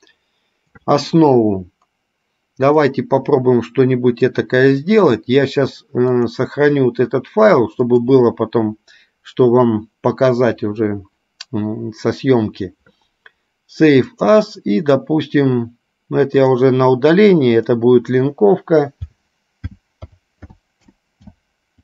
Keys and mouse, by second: 3.0-4.5 middle drag, 6.2 click, 8.0-14.9 drag.